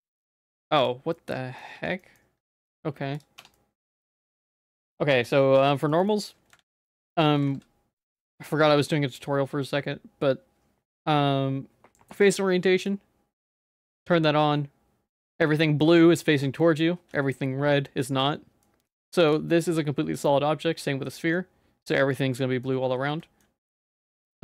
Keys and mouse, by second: 0.2 a, 1.2 middle click, 1.8 Tab, 2.0 middle click, 3.4 Tab, 3.5 middle click, 4.1 ctrl+s, 5.1 Tab, 5.3 middle click, 5.9 shift+middle click, 6.1 middle click, 6.6 ctrl+s, 6.9 Tab, 7.5 ctrl+s, 8.1-15.2 drag, 16.6 middle click, 18.6 middle click, 19.6-21.1 middle drag, 21.4 middle click, 22.1 middle click, 23.2 shift+middle click.